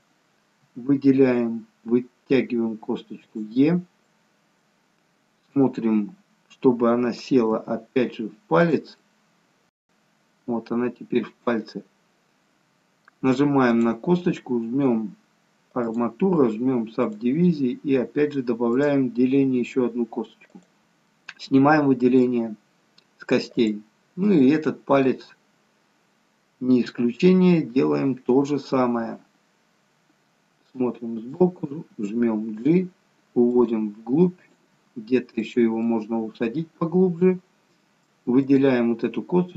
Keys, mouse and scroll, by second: 0.8 e, 4.2 middle click, 9.2 middle click, 13.6 click, 15.7 click, 21.0 middle click, 23.5 click, 24.3 middle click, 26.8 e, 28.6 scroll up 1, 28.7 middle click, 33.4 g, 34.3 click, 34.6 g, 35.8 middle click, 38.3 click.